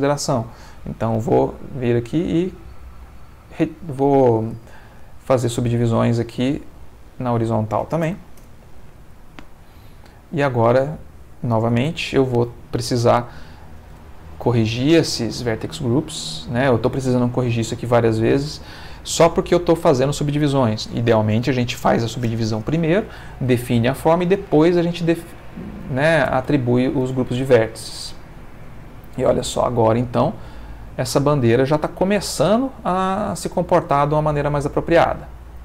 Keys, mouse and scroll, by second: 0.8 ctrl+r, 1.6-2.3 scroll up 2, 2.8 right click, 4.6 ctrl+r, 5.4-6.2 scroll up 2, 6.6 click, 8.0 0, 8.4 Return, 10.0 click, 13.9 a, 15.1 click, 16.1 click, 17.6 shift+click, 19.3 click, 26.4 Tab, 27.0 space, 31.4-32.4 middle drag, 33.1-34.5 middle drag, 34.9-35.6 middle drag.